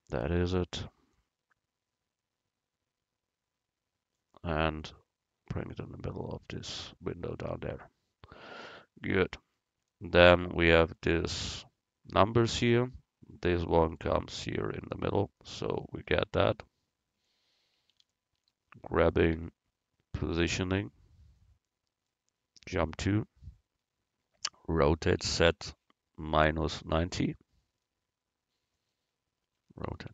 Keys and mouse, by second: 1.2-3.6 middle drag, 4.9-7.5 middle drag, 7.5 a, 7.9 middle click, 15.3-17.2 right drag, 17.2 KP_1, 19.4 g, 23.0 KP_Decimal, 24.9 r, 29.9 r.